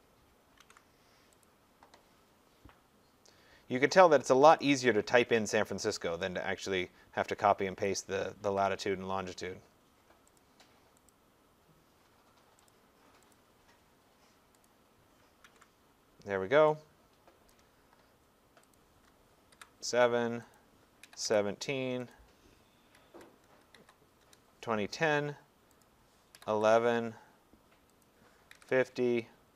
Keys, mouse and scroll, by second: 0.6 ctrl+v, 1.4 click, 4.6 click, 6.7 click, 7.8 click, 8.5 ctrl+c, 10.4 click, 11.1 click, 12.7 click, 13.4 click, 15.5 ctrl+v, 17.5 click, 18.8 click, 19.5 typing, 20.6 click, 20.8-24.7 typing, 22.1 click, 25.8 click, 26.1-26.9 typing, 28.0 click, 28.3-29.5 typing.